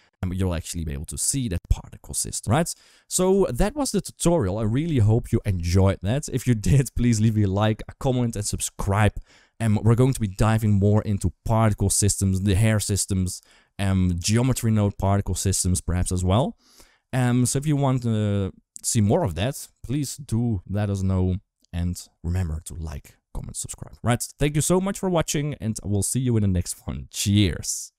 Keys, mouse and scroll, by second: 2.2 ctrl+s, 2.2 space.